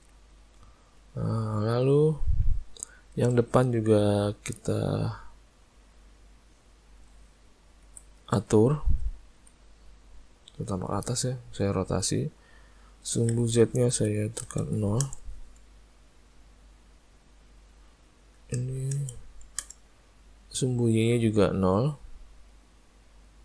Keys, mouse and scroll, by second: 0.0 middle click, 0.5 middle click, 1.0 click, 1.7 click, 2.3 middle click, 3.0 shift+middle click, 4.9 click, 8.5 shift+middle click, 9.4 r, 12.8 click, 16.5 click, 18.1 click, 23.2 click.